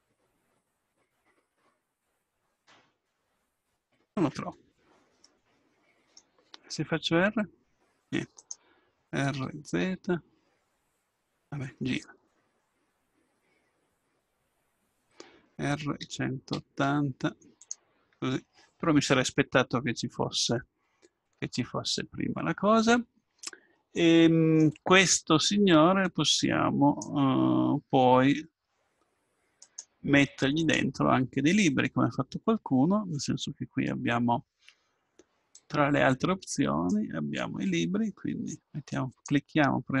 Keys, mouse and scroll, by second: 7.2 r, 10.3 r, 23.1-24.2 middle drag, 26.0-28.0 drag, 29.6-31.5 right drag, 30.6-33.1 drag, 35.5-38.2 drag, 39.1-40.0 drag.